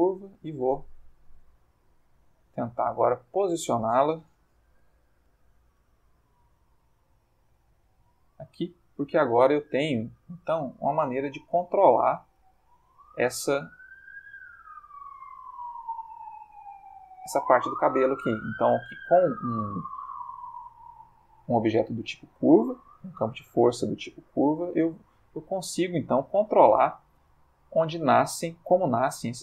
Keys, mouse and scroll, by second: 0.1 click, 0.7 r, 4.6 9, 4.7 0, 5.3 click, 5.7 g, 8.2 click, 8.9 click, 9.1 g, 11.4 click, 12.2 click, 12.4 g, 13.4 click, 14.1 click, 14.1 g, 15.1 click, 15.6 click, 15.7 g, 17.0 click, 17.5 click, 17.6 g, 18.5 click, 19.5 click, 20.1 g, 21.0 click, 21.5 click, 21.6 g, 22.2 click, 22.9 click, 23.1 g, 25.6 click, 26.1-28.6 middle drag, 28.7 ctrl+middle click.